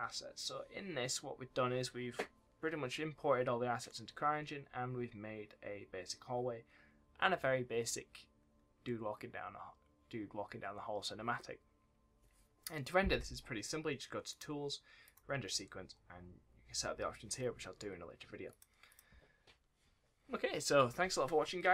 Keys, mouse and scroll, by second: 14.2 click, 18.8 click.